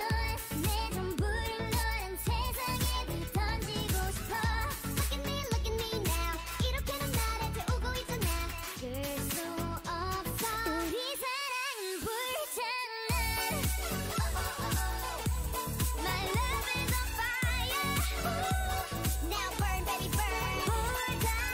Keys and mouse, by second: 3.4 Tab, 7.3-9.7 right drag, 11.0-12.8 right drag, 14.5-16.6 right drag, 20.2-21.5 middle drag.